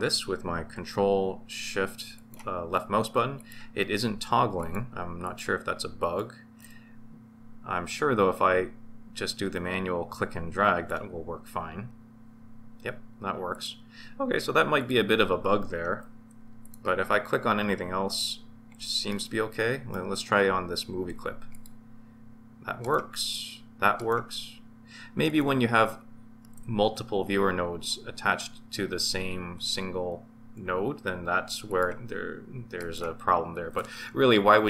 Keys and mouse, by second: 2.1 ctrl+shift+click, 3.3 ctrl+shift+click, 4.6 ctrl+shift+click, 5.2 ctrl+shift+click, 6.0 ctrl+shift+click, 8.3 click, 9.9-10.9 drag, 14.8 click, 16.6 ctrl+shift+click, 18.1 ctrl+shift+click, 19.0-20.1 middle drag, 21.5 ctrl+shift+click, 22.8 ctrl+shift+click, 25.2 ctrl+shift+click, 31.7 ctrl+shift+click, 32.8 ctrl+shift+click.